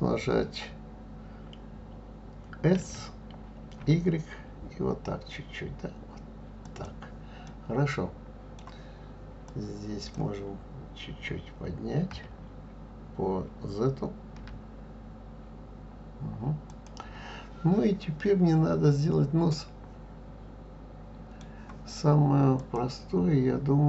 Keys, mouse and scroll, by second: 2.8 s, 7.5-9.5 middle drag, 9.5 click, 12.1 g, 19.5-22.5 middle drag, 22.6 click.